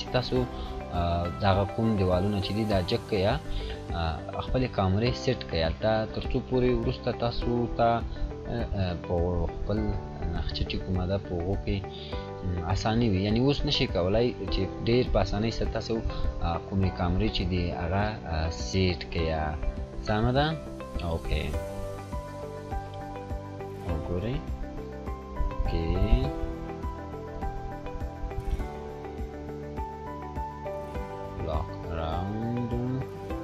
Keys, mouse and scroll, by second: 3.2 scroll down 1, 4.1-5.7 drag, 11.5 scroll down 1, 12.0-13.2 drag, 13.8 scroll up 1, 14.5-15.2 click, 15.5 scroll up 1, 19.5 click, 22.6-24.1 drag, 30.3-32.1 scroll down 1, 32.1 click, 32.9-33.3 scroll down 1.